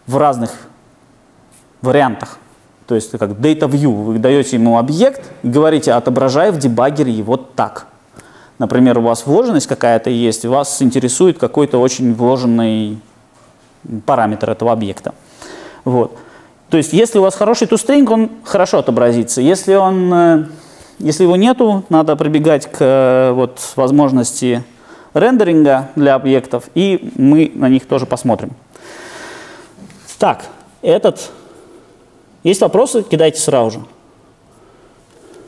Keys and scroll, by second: 31.4 super+F2, 31.5 super+F2.